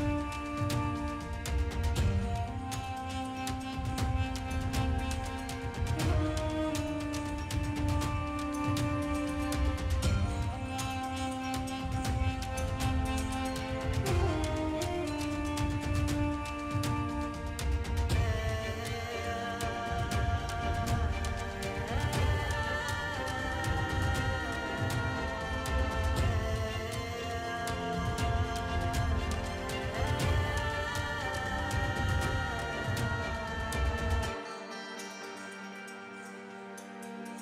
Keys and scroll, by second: 2.3 ], 4.6 [, 8.1 space, 8.5 space, 9.1 ctrl+space, 12.6 space, 15.6 ], 18.2 ], 18.8 ctrl+alt+z, 21.7 [, 24.7 space, 25.5 ctrl+space, 28.2 l, 30.1 ctrl+alt+d, 31.0 2, 31.4 5, 32.2 ctrl+j, 32.3 v, 33.0 ctrl+t, 36.1 v.